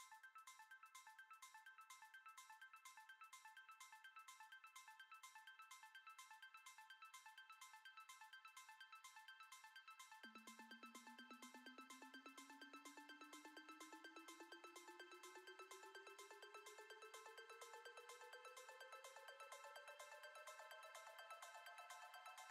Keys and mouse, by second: 0.4 alt+shift+click, 1.4-1.8 middle drag, 2.0 ctrl+b, 4.1-5.7 middle drag, 5.7 F6, 6.5 middle click, 7.7 click, 8.2 click, 8.6 shift+middle click, 9.5 shift+click, 10.2 middle click, 11.1 typing, 13.5 alt+e, 19.0 click, 19.7 click, 20.3 click, 21.1 shift+click, 22.3 shift+click.